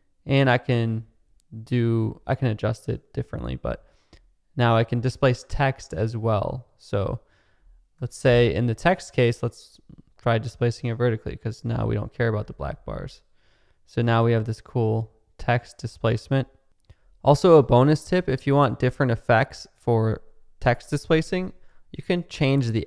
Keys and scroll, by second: 7.9 0, 8.2 BackSpace, 13.9 space, 15.8 space.